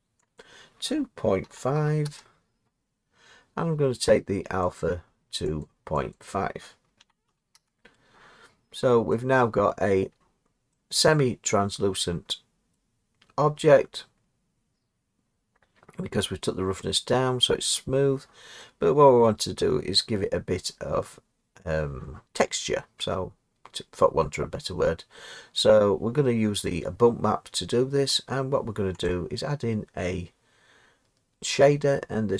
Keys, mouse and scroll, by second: 0.4 click, 1.8 typing, 2.1 Return, 4.8 click, 5.6 click, 6.1 click, 7.0 typing, 7.5 Return, 9.7 middle click, 10.1 scroll, 12.7 middle click, 19.6 middle click, 20.9-22.0 scroll down 3, 22.0 scroll, 29.1 click.